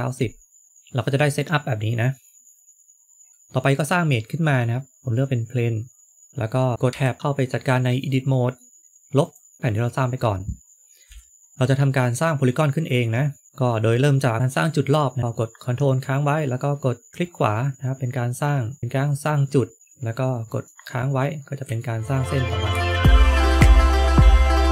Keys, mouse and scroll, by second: 0.7 middle click, 3.3 shift+a, 6.3 middle click, 8.5 middle click, 8.8 Delete, 9.5 middle click, 11.0 middle click, 11.0 KP_3, 14.3 shift+middle click, 17.1 ctrl+right click, 20.4 ctrl+right click, 21.2-21.8 scroll up 3, 21.7 shift+middle click, 22.3-23.1 scroll up 4, 22.9 shift+middle click, 23.1 click, 23.7 ctrl+right click, 24.1 shift+middle click.